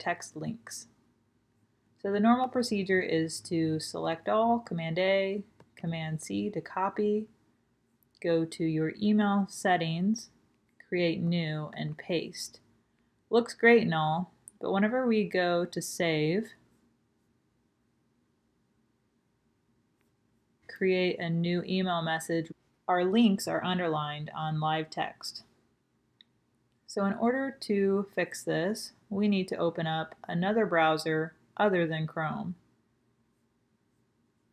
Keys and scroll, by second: 3.4 super+a, 3.6 super+a, 5.5 super+c, 11.6 super+v.